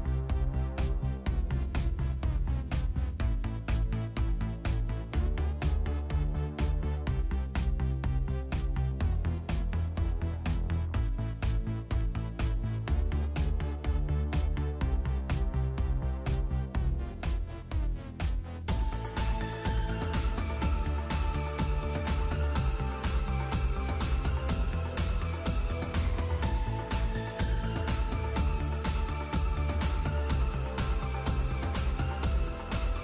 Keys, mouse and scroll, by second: 1.2 right click, 1.4-10.2 typing, 1.7 right click, 2.2 right click, 2.8 right click, 3.3 right click, 4.0 right click, 4.5 right click, 5.0 right click, 5.5 right click, 6.0 right click, 6.6 right click, 7.1 right click, 7.7 right click, 8.2 right click, 8.8 right click, 9.4 right click, 10.0 right click, 14.9 click, 15.7 shift+middle click, 16.3 click, 16.7 ctrl+middle click, 16.9 middle click, 17.1 shift+middle click, 17.4 space, 25.2 space, 26.8 click, 27.7 KP_5, 27.9 KP_3, 29.3 b, 31.4 click, 32.4 click.